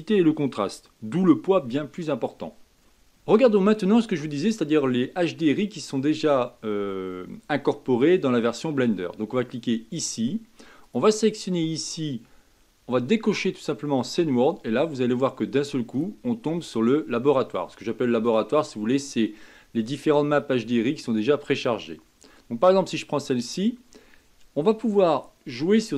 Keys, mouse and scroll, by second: 9.9 click, 10.8-13.8 drag, 15.9-19.0 drag.